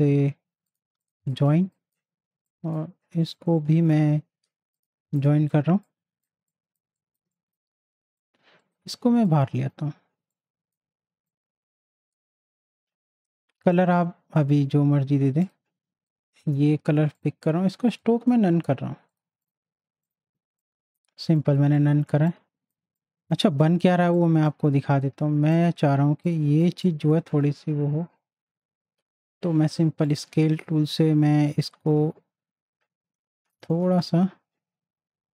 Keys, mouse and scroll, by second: 0.6 click, 1.2 space, 1.3 click, 1.7 space, 2.5 click, 3.3 right click, 4.7 click, 5.4 z, 5.8 click, 6.4 space, 6.5 click, 7.2 space, 7.3-12.3 drag, 12.3 space, 12.4 click, 12.8 space, 16.0 shift+click, 17.2 click, 20.2 z, 20.6 click, 21.2 space, 21.3 click, 23.5 space, 23.6 click, 26.7 space, 26.8 click, 30.0-34.2 drag, 34.2 ctrl+z.